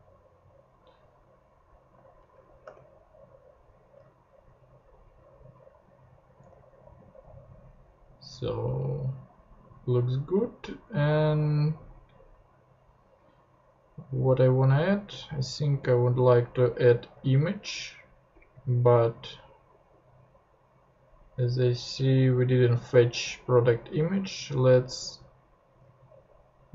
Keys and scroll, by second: 2.6 ;, 6.4 super+Tab, 24.1 super+Tab.